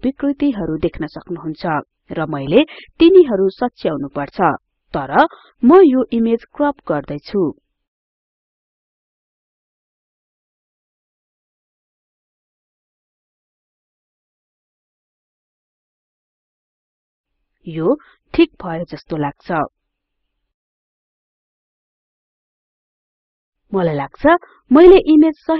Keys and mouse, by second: 14.6 click, 16.6-23.1 drag, 25.1 click.